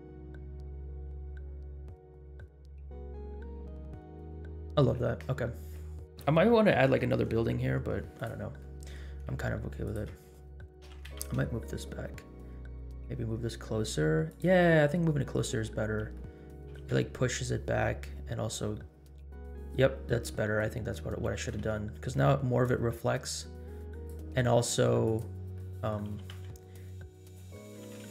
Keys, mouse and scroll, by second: 1.2-1.6 scroll down 2, 3.4 scroll down 2, 4.8 space, 8.1-8.6 drag, 8.9 middle drag, 9.8-10.1 shift+drag, 10.8 g, 14.7 scroll up 1, 15.4 scroll down 2, 16.1-16.5 middle drag, 16.6 g, 21.2 g, 25.0 click, 25.7 middle click, 26.0 g, 27.5-28.1 middle drag, 27.8 g.